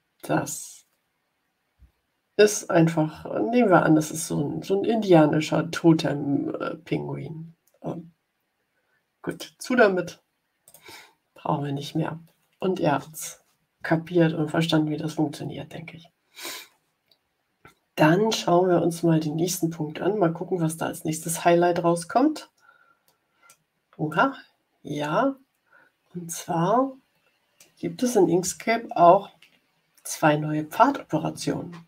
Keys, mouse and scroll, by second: 9.2 click, 10.6 click, 21.1-23.5 middle drag, 24.0-27.0 middle drag, 27.0 click.